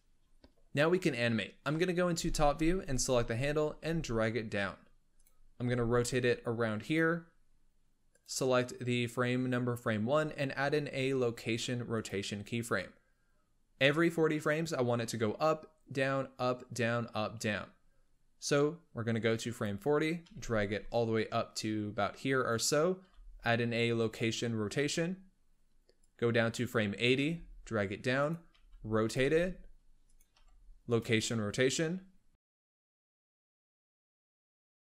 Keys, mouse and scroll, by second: 1.5 KP_7, 2.8 click, 3.6 g, 5.6 r, 8.0-10.7 drag, 10.7 i, 19.2-20.2 drag, 20.2 g, 22.9 i, 25.9-27.1 drag, 27.1 g, 28.5 r, 29.1 g, 30.2 i, 32.2-34.2 drag, 34.2 g.